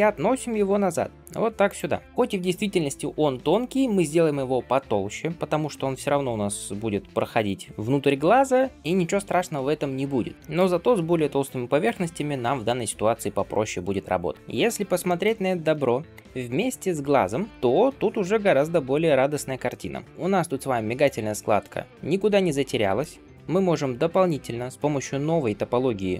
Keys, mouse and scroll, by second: 10.3 shift+middle click, 10.3 scroll down 1, 14.3 alt+z, 14.3 scroll down 1, 14.5 alt+z, 14.9 middle click, 15.3 scroll down 1, 15.6 shift+middle click, 16.0 middle click, 16.7 scroll down 1, 17.5-18.1 scroll up 1, 18.3 ctrl+space, 18.8 shift+middle click, 19.2-19.5 scroll down 2, 19.5 middle click, 19.9 scroll up 2, 20.1 alt+z, 20.9-22.5 middle drag, 22.5 scroll down 1, 22.8 middle click, 23.7 g, 25.8 middle click.